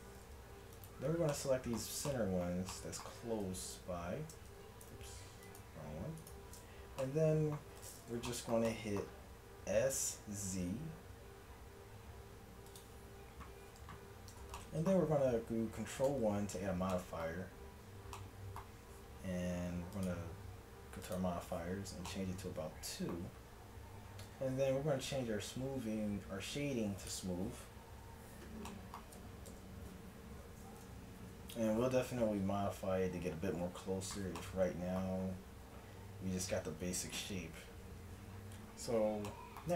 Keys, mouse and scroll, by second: 0.8 click, 1.4-2.8 middle drag, 3.7-5.5 drag, 5.5 middle click, 6.2-7.2 drag, 7.2 middle click, 7.5 click, 7.6 middle click, 7.9 click, 8.4 middle click, 9.9 s, 10.6-12.7 drag, 12.7-14.1 middle drag, 14.4 Tab, 16.1 ctrl+1, 22.1-23.2 middle drag, 24.2-27.1 middle drag, 24.3 t, 27.1 click, 28.1 t, 28.3 click, 28.7 middle click, 29.5 KP_1, 30.8 KP_Decimal, 34.4-36.3 middle drag, 37.3 KP_1.